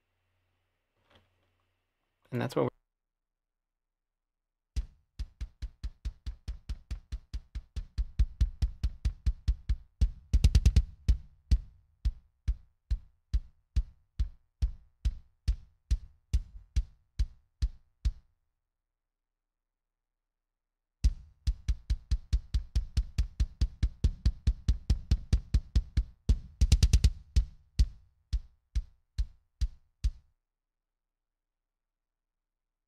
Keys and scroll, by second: 2.8 s, 3.1 space, 19.1 space, 19.3 space, 30.3 space.